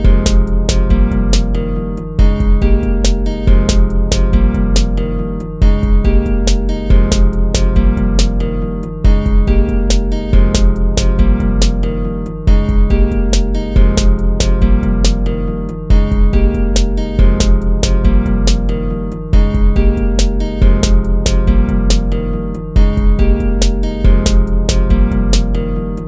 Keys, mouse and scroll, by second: 1.9 ctrl++, 3.0 ctrl+-, 3.3 ctrl+-, 3.9 ctrl++, 6.5 ctrl+-, 7.9 ctrl++, 8.1 ctrl+-, 8.5 ctrl++, 12.0 ctrl+-, 12.9 ctrl+-, 13.6 ctrl+-, 14.7 ctrl+-, 16.3 ctrl++, 16.5 ctrl+-, 19.6 ctrl+-, 20.3 right click, 21.9 right click, 22.3 BackSpace, 24.4 BackSpace, 25.3 ctrl++.